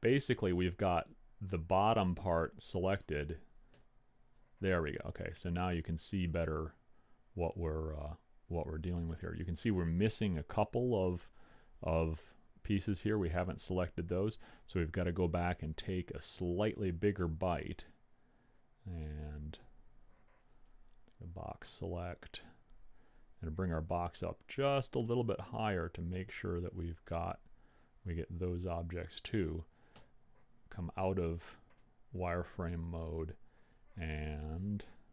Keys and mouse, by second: 1.4 click, 4.1 z, 6.2 click, 15.8 KP_1, 17.6 z, 20.2 b, 30.4 z.